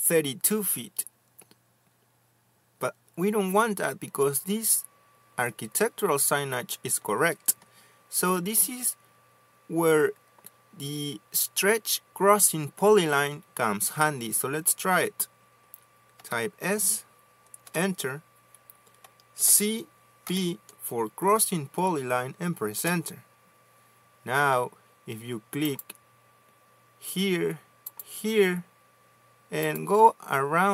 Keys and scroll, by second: 1.4 Escape, 17.1 s, 18.6 Return, 20.3-21.7 typing, 23.7 Return.